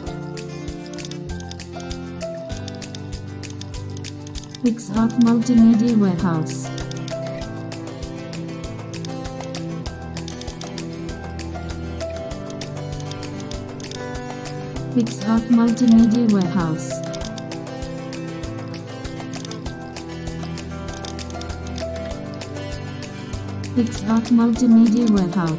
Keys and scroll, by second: 2.3 super+space, 5.9 super+c, 6.1 super+n, 8.4 super+z, 9.6 super+c, 9.8 super+n, 12.0 super+v, 12.2 super+t, 18.9 super+d, 23.2 super+d, 24.4 super+d, 25.4 shift+super+F2.